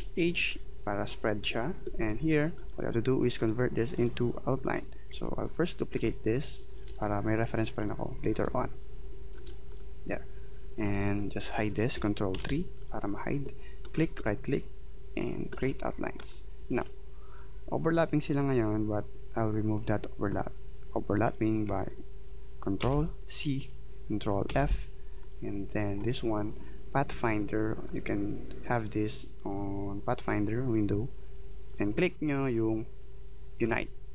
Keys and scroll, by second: 12.4 ctrl+3, 22.8 ctrl+c, 24.5 ctrl+f.